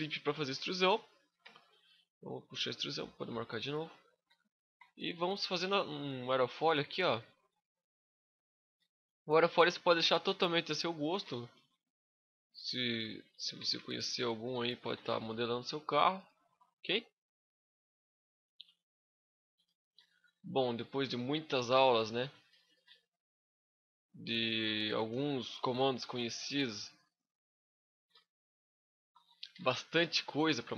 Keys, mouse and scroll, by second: 0.4 middle click, 3.2 scroll up 1, 4.0 KP_7, 4.5 KP_5, 5.9 scroll up 3, 5.9 z, 6.1 shift+middle click, 6.5 z, 7.3 g, 8.4 click, 8.5 r, 9.9 click, 10.1 s, 10.9 click, 10.9 g, 12.1 shift+click, 13.1 ctrl+z, 14.6 g, 15.9 shift+click, 15.9 e, 16.2 right click, 17.7 click, 17.8 g, 18.5 right click, 19.5 click, 19.6 g, 20.4 shift+click, 20.7 r, 21.4 click, 21.6 shift+middle click, 22.2 e, 22.5 right click, 26.7 click, 27.2 right click, 27.7 g, 28.8 shift+click, 29.2 g, 30.0 shift+click, 30.3 scroll down 2, 30.5 middle click.